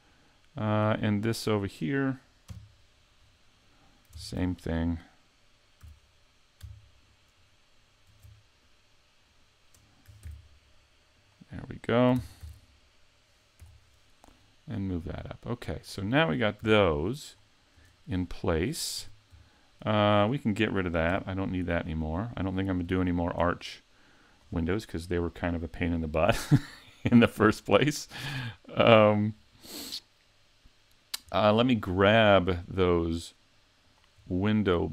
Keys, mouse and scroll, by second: 0.1 middle click, 1.6 right click, 2.5 KP_Decimal, 3.3 scroll down 2, 3.7 middle click, 4.1 ctrl+Tab, 5.8 a, 7.0 alt+right click, 8.6 shift+right click, 10.2 shift+right click, 10.3 ctrl+e, 12.2 ctrl+Tab, 13.6 l, 15.1 click, 16.1 scroll down 6, 16.6 a, 17.4-18.2 scroll down 2, 17.8 Tab, 18.3 middle click, 19.0 a, 19.5 shift+middle click, 20.2 right click, 21.1 x, 22.1 scroll down 4, 22.5 scroll up 5, 23.0 shift+middle click, 23.9 middle click, 27.6-28.3 scroll down 1, 28.3 middle click, 28.3-29.4 scroll down 1, 29.4-30.9 scroll up 3, 31.3 scroll down 4, 31.8 shift+middle click, 33.9 shift+click, 34.6 middle click.